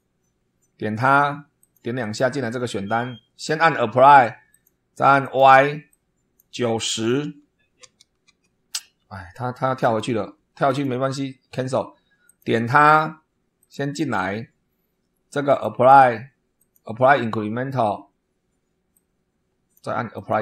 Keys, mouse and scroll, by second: 1.5 click, 1.9 click, 3.4 click, 4.4 click, 5.2 click, 5.8 click, 7.7 9, 8.2 0, 9.7 click, 10.6 click, 12.2 click, 13.5 click, 13.9 click, 15.4 click, 16.5 click, 18.8-19.8 drag, 20.1 click.